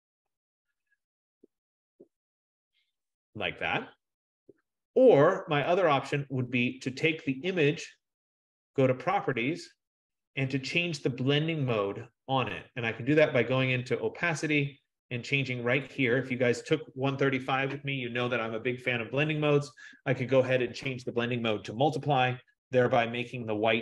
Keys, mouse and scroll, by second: 5.3 F15, 8.8 click, 13.3 click, 16.2 click, 22.1 click.